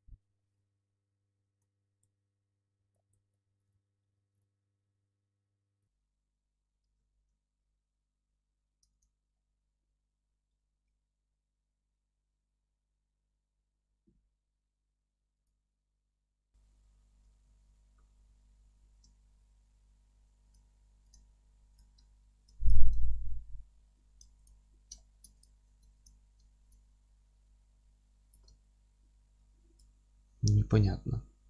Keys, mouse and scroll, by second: 1.4 ctrl+t, 2.0 alt+e, 2.7 Escape, 2.9 ctrl+z, 3.6 click, 3.9 2, 4.1 1, 4.3 click, 4.6-5.8 middle drag, 4.7 e, 5.8 click, 5.8-9.0 alt+middle drag, 7.2 alt+z, 9.0 click, 9.3-15.4 middle drag, 9.9 g, 15.4 click, 15.7-20.4 alt+middle drag, 17.4 a, 18.8 shift+n, 20.4 click, 22.1 alt+middle click, 22.6 click, 22.9-24.4 alt+middle drag, 24.4 click, 24.9 alt+middle click, 25.4 click, 26.5 alt+e, 28.3 click, 28.6-31.4 alt+middle drag, 29.6 scroll up 1, 30.2 alt+q.